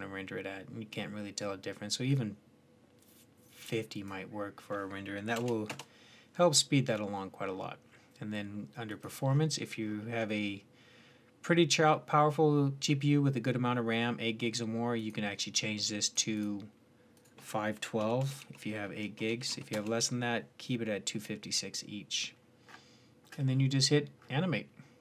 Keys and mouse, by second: 5.8-8.7 middle drag, 8.7-14.8 drag, 24.9 click.